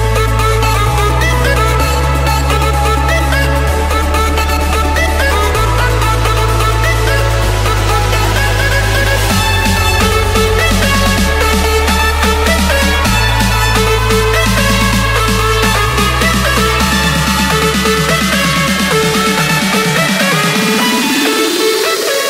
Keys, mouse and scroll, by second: 0.7-1.8 drag, 2.8 scroll down 1, 3.5-4.5 scroll down 1, 4.5-6.0 scroll up 3, 6.3-7.7 typing, 8.3 Return, 10.2 click, 10.5 Return, 11.6 click, 12.9-13.9 scroll, 13.9-15.6 scroll, 15.6 click, 17.4 click, 19.4 typing, 20.1 Return, 22.1 Escape.